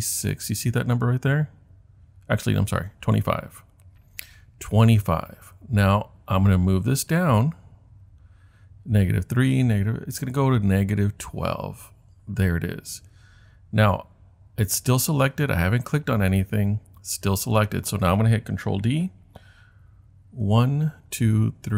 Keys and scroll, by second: 20.5 super+d, 21.1 super+d.